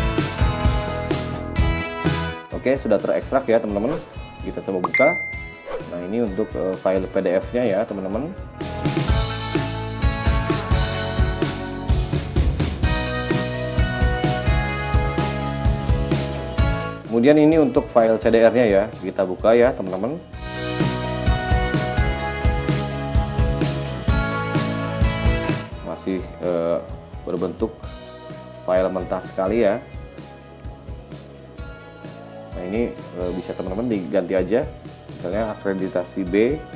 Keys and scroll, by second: 20.8 x.